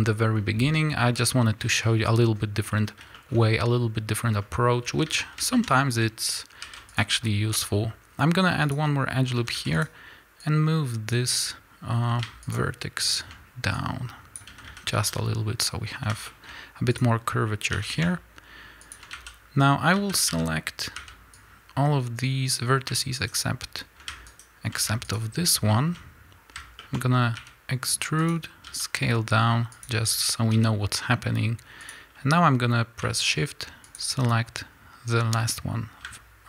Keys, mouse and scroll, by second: 0.6-1.0 scroll down 2, 1.0-2.8 scroll up 2, 2.8 scroll down 2, 3.0-8.8 shift+middle drag, 3.3-4.3 scroll up 2, 4.3 scroll down 1, 4.8 a, 5.6 scroll up 1, 6.6 ctrl+r, 8.8 click, 9.3 a, 9.8 click, 10.4-12.5 drag, 13.7-16.2 drag, 14.4 a, 16.2 shift+middle click, 16.9 click, 17.6 g, 19.0 a, 22.5 b, 23.1-25.0 shift+right drag, 25.0 shift+click, 25.6-28.6 shift+middle drag, 25.8-26.7 scroll up 3, 27.3 e, 28.6 s, 30.5 g, 33.9 shift+click.